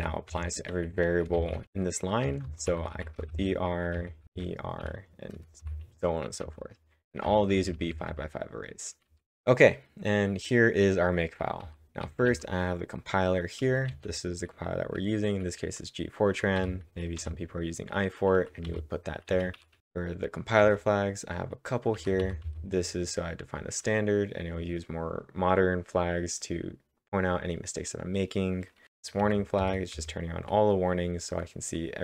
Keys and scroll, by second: 1.3-4.7 typing, 6.2 typing, 7.7-9.1 typing, 11.4-12.5 typing, 13.7 j, 16.3-17.1 typing, 19.3-20.6 typing, 28.8 typing.